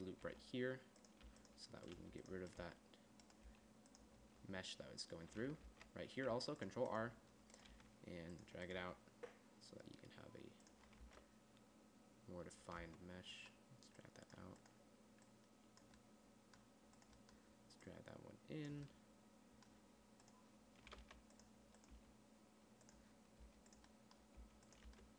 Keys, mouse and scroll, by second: 0.7 g, 1.7 g, 2.4 g, 3.9 g, 6.1 ctrl+r, 7.4 click, 8.1 g, 9.2 g, 11.4 Tab, 13.2 Tab, 18.3 middle click, 21.4 g, 22.3 g, 23.8 g, 24.8 g.